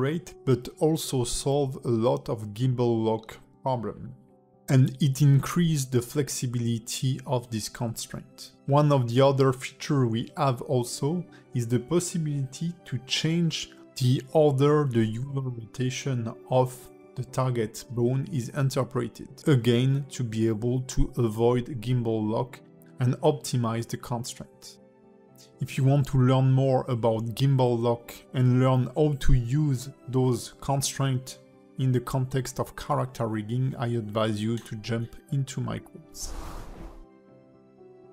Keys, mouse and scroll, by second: 0.0 r, 3.0 click, 4.0 click, 5.4 click, 5.9 r, 10.4 click, 13.6 click, 16.7 click, 18.4 click, 19.2 click, 21.1 click, 22.7 click, 23.6 click, 24.4 click, 27.1 click, 34.6 r, 35.6 click, 36.9 r, 37.6 click.